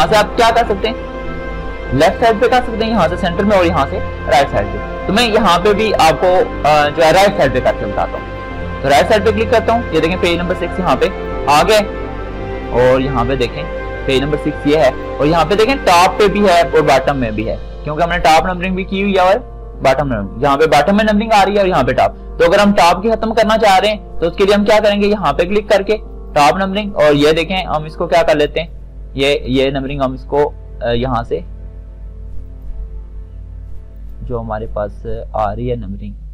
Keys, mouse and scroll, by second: 8.4 click, 11.1-22.6 drag, 23.7 click, 29.0 click, 32.7 click.